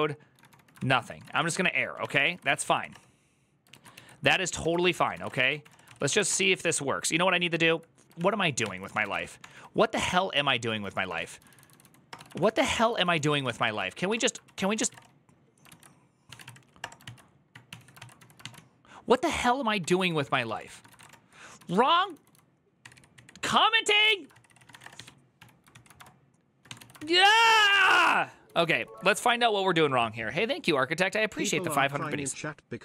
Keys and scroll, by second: 0.0-2.2 typing, 1.9 Return, 2.0 ctrl+a, 2.4 ctrl+c, 2.6 Up, 2.7 Return, 3.5 ctrl+a, 3.7-6.4 typing, 8.0 ctrl+o, 8.4 ctrl+t, 8.5-18.0 typing, 15.4 Return, 15.4 ctrl+p, 16.8 ctrl+c, 17.8 ctrl+c, 18.2 ctrl+v, 19.0-29.2 typing, 31.7 alt++, 31.7 j.